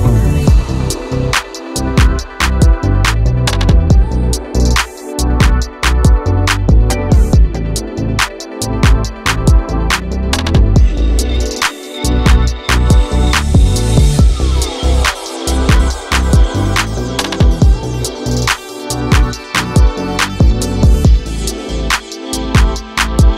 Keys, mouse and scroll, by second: 3.4-10.4 drag, 12.2-17.5 drag, 18.7 scroll up 2, 19.8-21.4 scroll up 1, 21.4-22.3 drag.